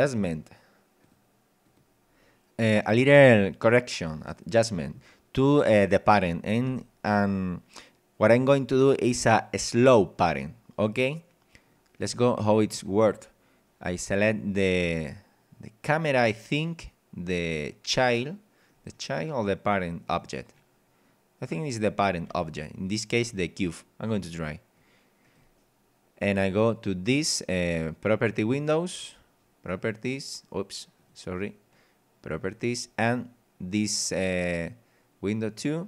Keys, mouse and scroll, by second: 1.0 click, 1.6 click, 3.9 click, 14.8 right click, 18.1 middle click, 18.9 scroll up 1, 20.0 right click, 21.8-22.2 scroll up 1, 22.2 z, 22.4 scroll down 1, 24.8 click, 27.7 click, 29.8 click, 31.0 click, 32.4 click.